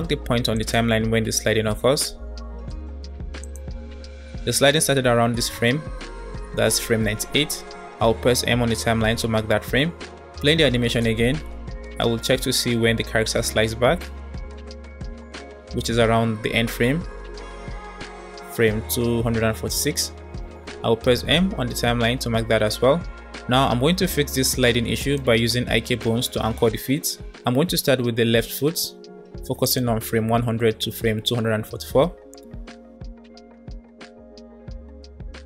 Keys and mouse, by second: 0.6 click, 0.9 space, 1.7 space, 2.8 space, 3.3 click, 3.5 space, 4.5 space, 5.1-5.7 Left, 6.0 Left, 6.1 Right, 6.3 Right, 6.4 Right, 6.6 Left, 8.4 m, 9.9 space, 15.4-17.9 typing, 21.0 m, 29.7-33.0 drag, 34.5 click.